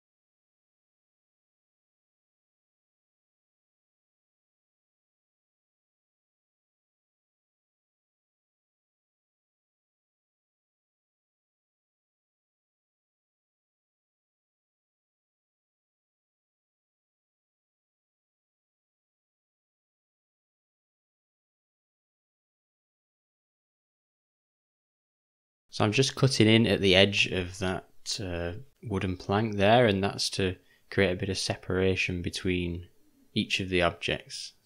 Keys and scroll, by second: 7.4 shift+`, 18.2 d, 18.7 u, 19.3 ], 19.4 ], 26.4 o, 27.4 Delete, 27.7 Delete, 28.7 d, 28.7 u, 33.2 o.